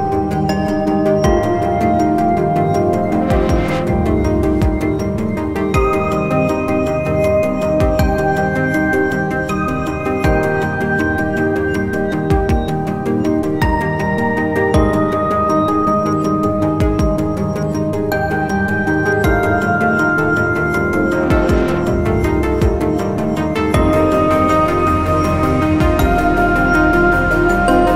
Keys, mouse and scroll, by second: 0.6 scroll up 2, 0.8 alt+click, 4.0 double click, 9.2 alt+click, 12.0 scroll down 1, 12.6 scroll up 1, 12.7 alt+middle click, 13.2 scroll down 1, 13.6 alt+click, 18.8 scroll up 1, 19.1-19.6 scroll down 2, 19.6 alt+click, 22.7 scroll down 1, 22.9 scroll up 1, 23.4 alt+click, 24.7 scroll up 1, 24.9-25.2 scroll down 2, 25.3 alt+middle click, 25.6 scroll down 1, 25.8 scroll up 1, 25.9-26.4 scroll down 1, 26.4-26.8 scroll up 1, 26.8-27.9 scroll down 1.